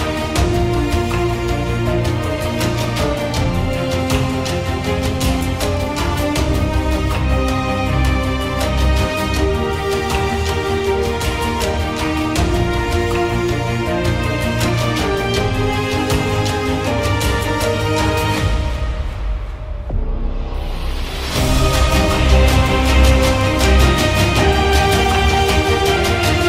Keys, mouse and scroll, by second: 7.4 click, 7.6 1, 10.8 click, 11.4 ctrl+j, 21.5-24.4 drag.